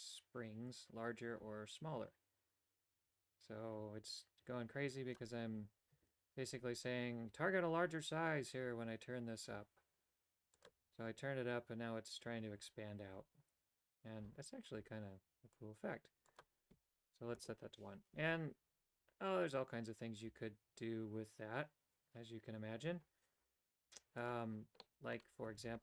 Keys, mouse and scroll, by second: 10.7 click, 16.3-18.4 drag, 24.2 click, 24.9 middle click, 25.7 shift+a.